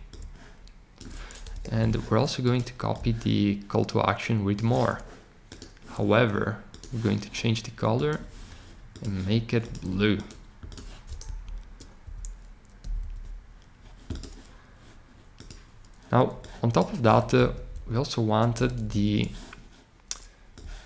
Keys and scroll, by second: 1.5 BackSpace, 11.2 shift+Up, 12.0 Up, 12.8 Up, 13.0 Up, 17.5 shift+Down, 17.7 shift+Down, 18.5 Down, 18.7 Down.